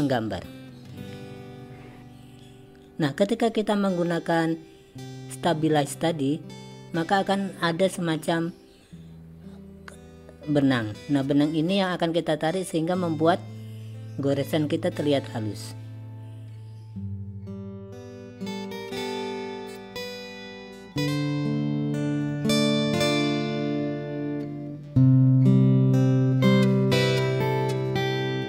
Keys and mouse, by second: 2.0-28.4 drag.